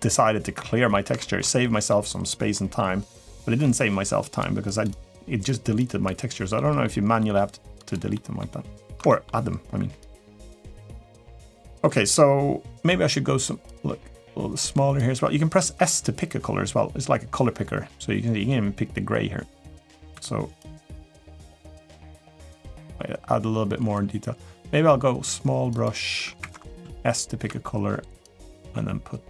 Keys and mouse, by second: 0.3 middle click, 0.9 shift+middle click, 1.4 middle click, 2.3 middle click, 3.4 middle click, 3.9 click, 4.4 click, 4.7 click, 5.6 click, 6.3 middle click, 7.0 middle click, 7.5 click, 7.9 middle click, 8.8 shift+middle click, 9.8 click, 10.2 click, 10.9 middle click, 11.4 middle click, 13.5-14.8 drag, 15.3 s, 20.3 click, 21.3 click, 21.7 click, 22.0 click, 22.4 click, 23.7 click, 25.4 click, 26.2 Escape, 26.6 s, 28.0 click.